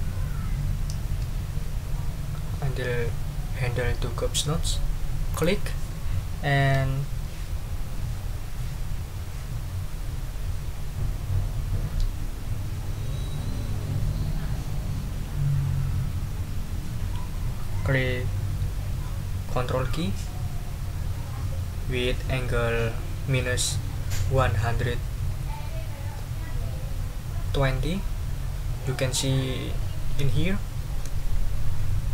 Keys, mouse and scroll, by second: 5.3 click.